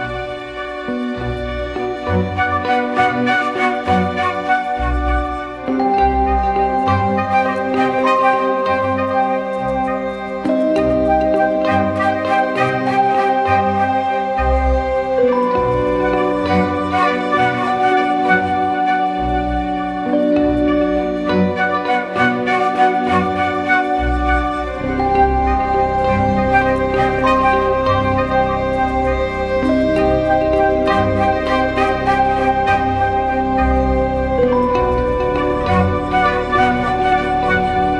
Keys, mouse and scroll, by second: 0.2 ctrl+t, 2.2 ctrl+z, 3.6 ctrl+z, 7.2 Left, 7.4 Left, 7.6 Left, 7.7 Left, 8.0 Right, 8.2 Right, 9.0 Right, 9.6 Right, 10.2 Right, 10.4 Right, 11.3 Right, 11.8 Right, 14.6 Left, 14.8 Left, 14.9 Left, 15.1 Left, 15.8 Return, 18.7 Right, 19.0 Left, 22.6 ctrl+click, 25.1 right click.